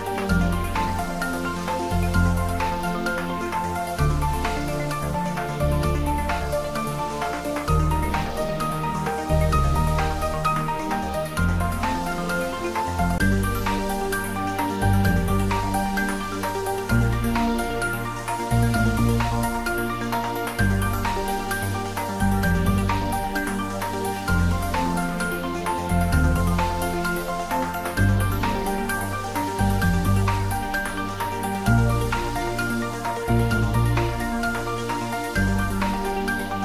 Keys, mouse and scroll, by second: 5.6 click, 7.9 click, 10.4 m, 12.6 click, 15.2 click, 19.1 click, 23.1-24.7 scroll up 1, 25.1 scroll up 1, 31.5-36.6 drag.